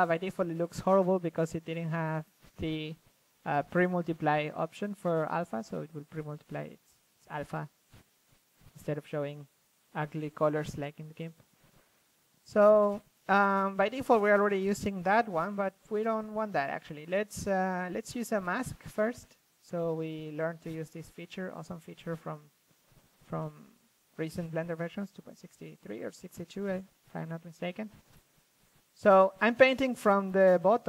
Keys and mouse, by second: 0.0 click, 3.7-7.4 drag, 7.5 f, 9.0-10.7 drag, 9.9 ctrl+z, 10.7-11.9 drag, 12.9 middle click, 13.0 ctrl+z, 13.5-14.6 drag, 14.7 middle drag, 15.2 ctrl+z, 15.5-16.0 drag, 16.0 ctrl+z, 16.3 f, 17.5-19.4 drag, 18.0 ctrl+z, 20.0-20.3 drag, 20.6-21.7 drag, 22.2-23.7 drag, 23.9-25.3 middle drag, 25.0 f, 25.3-30.4 drag, 30.4-30.8 middle drag.